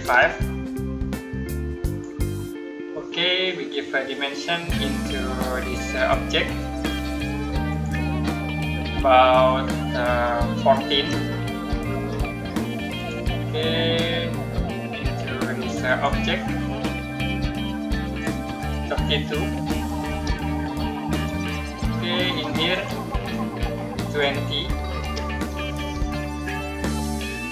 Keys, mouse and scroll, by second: 1.7 click, 5.8 click, 10.8-11.6 typing, 12.8 click, 15.7 click, 19.5-19.9 typing, 21.0 click, 24.9-25.6 typing, 26.8 click.